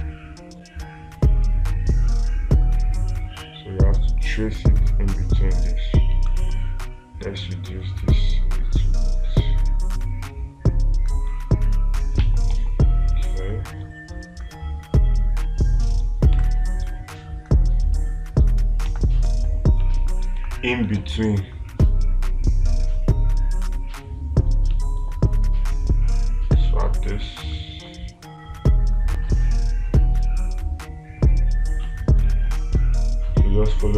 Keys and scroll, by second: 12.7 ctrl+z, 16.8 space, 19.3 space, 20.8 space.